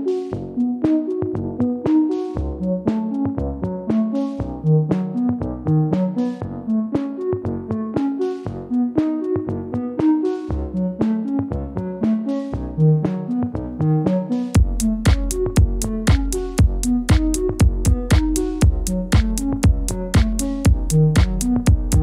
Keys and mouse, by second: 10.1 click, 10.9 shift+a.